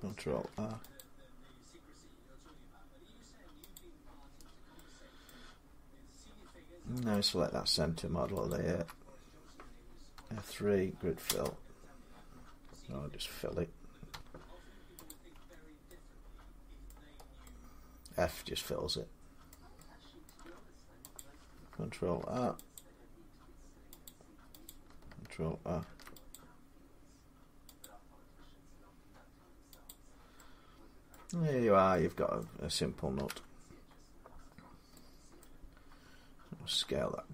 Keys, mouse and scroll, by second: 0.3 ctrl+r, 0.7 click, 3.5 click, 4.1 middle click, 4.2 middle click, 5.0 middle click, 5.2 scroll up 2, 5.6 scroll, 7.0 scroll up 1, 7.0 click, 8.3 alt+click, 8.4 middle click, 9.9 F3, 11.0 Return, 13.9 f, 14.9 click, 15.2 Tab, 16.7 middle click, 17.0 scroll down 3, 17.2-17.9 scroll up 3, 19.3 middle click, 20.1 middle click, 20.2 scroll, 20.2 Tab, 21.0 click, 22.0 ctrl+r, 22.6 click, 23.9 click, 24.5 click, 25.6 ctrl+r, 26.2 click, 29.5 click, 29.7 click, 31.0 middle click, 31.3 middle click, 31.4 middle click, 32.2 click, 32.2 middle click, 32.2 scroll up 2, 33.1 Tab, 33.7 scroll down 1, 35.2 middle click, 36.5 s, 36.6 scroll up 1.